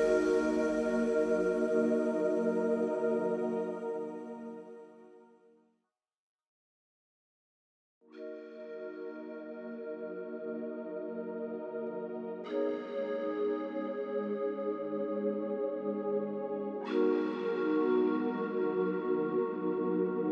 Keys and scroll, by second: 3.3 ctrl+;, 11.9 ctrl+g, 13.0 ctrl+space.